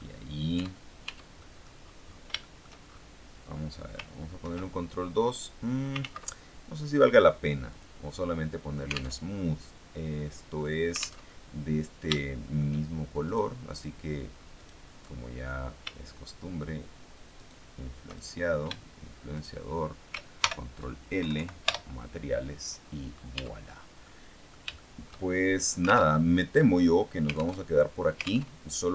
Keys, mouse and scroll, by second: 0.1 middle click, 0.5 Tab, 1.3 click, 1.7-2.3 scroll down 3, 2.3 shift+middle click, 3.0-3.7 shift+scroll up 3, 4.3 ctrl+2, 6.0 ctrl+z, 7.6 click, 9.1 alt+Tab, 11.1 alt+Tab, 12.0 shift+right click, 13.1 right click, 14.5 right click, 18.1 shift+right click, 19.3 shift+right click, 20.3 ctrl+shift+l, 21.1 ctrl+Tab, 21.7 ctrl+Return, 22.9-23.5 scroll down 2, 23.2 Tab, 23.9 middle click, 24.7 shift+middle click, 25.9 alt+Tab, 27.5 alt+Tab, 28.3 alt+Tab.